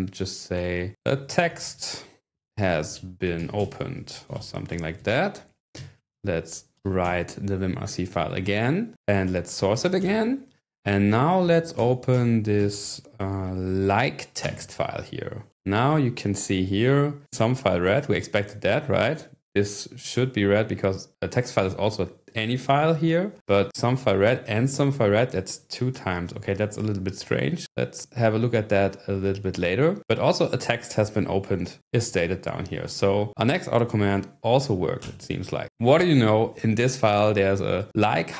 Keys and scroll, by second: 0.0-5.6 typing, 5.8 Escape, 6.2 Escape, 6.7 typing, 9.0-10.2 typing, 11.3-12.6 typing, 13.4 ctrl+n, 14.5 Return, 35.0 Return.